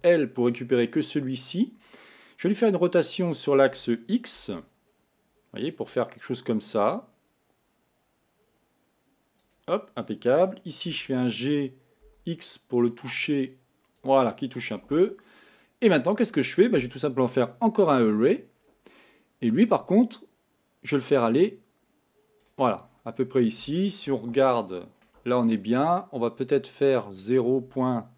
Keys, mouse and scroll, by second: 4.0 r, 11.1 g, 14.9 Tab, 16.2 click, 18.4-20.0 scroll down 4, 20.0-22.9 drag, 22.9-23.5 scroll up 5, 24.4-26.6 shift+middle drag, 26.6 click.